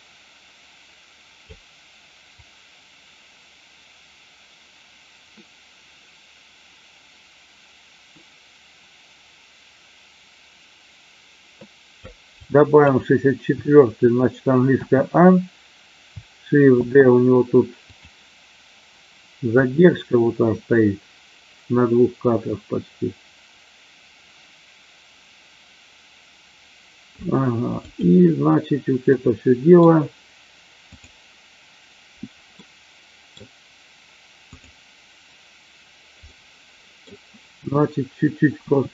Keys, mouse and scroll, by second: 2.5-12.0 drag, 12.4-12.9 drag, 14.7 a, 16.8 shift+d, 19.6-27.2 drag, 27.8 click, 29.1-29.7 middle drag, 32.5-33.3 middle drag, 36.2-37.1 middle drag, 38.6 r.